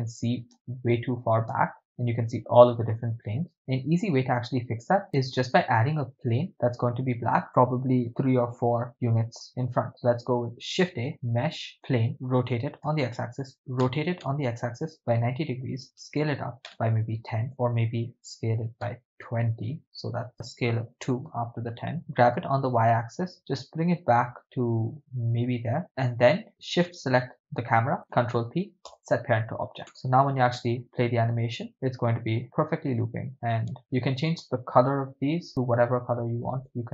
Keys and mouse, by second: 0.5 shift+space, 1.8 shift+space, 3.9-4.9 drag, 5.1 KP_0, 6.2 drag, 6.5-6.9 shift+middle drag, 10.5 shift+a, 12.4 e, 12.8 x, 13.8 r, 15.0-19.0 typing, 15.5 Return, 17.5 Return, 19.2 Return, 22.1 g, 22.3 y, 25.8 ctrl+click, 26.8 shift+right click, 28.1 ctrl+p, 29.9 KP_0, 30.6 shift+space, 33.3 click, 33.8 shift+space, 34.4 right click, 35.5 click.